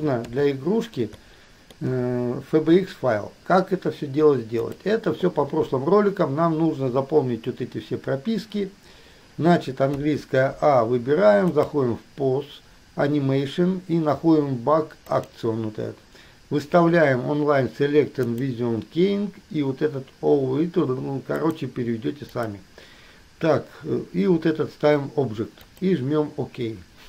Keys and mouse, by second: 0.0 KP_2, 0.4 KP_3, 4.8 click, 10.2 a, 11.8-19.3 drag.